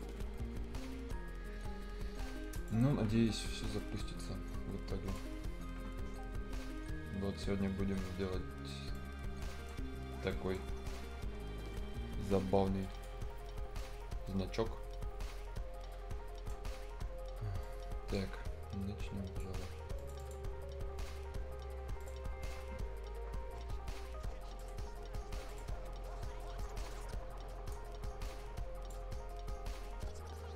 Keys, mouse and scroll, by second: 2.5 click, 3.7 right click, 5.0 click, 6.4 scroll up 1, 7.2-7.8 scroll up 1, 7.8 scroll down 1, 8.1-8.9 scroll up 1, 8.9 right click, 9.9-10.2 scroll up 1, 10.2 right click, 10.6 scroll down 1, 12.8 click, 12.8 click, 13.7-17.6 right drag, 17.6-19.9 drag, 26.8-30.5 drag.